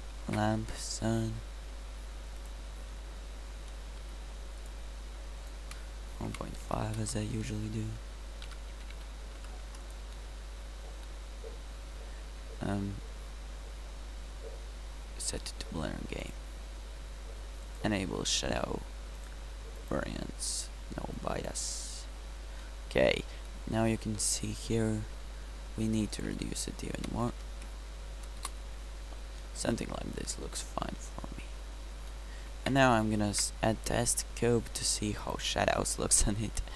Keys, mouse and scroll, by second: 0.3 shift+a, 4.0 r, 8.5 g, 15.4-21.2 drag, 23.1 drag, 24.0-24.5 middle drag, 24.8-26.4 right drag, 26.1 click, 26.4-27.9 middle drag, 29.2-29.9 middle drag, 30.4-31.3 middle drag, 33.3 shift+a, 36.2 KP_Decimal.